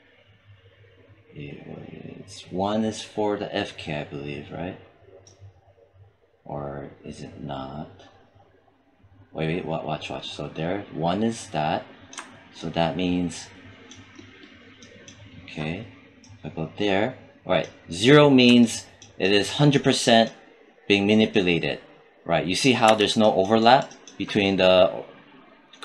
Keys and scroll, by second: 22.7 z.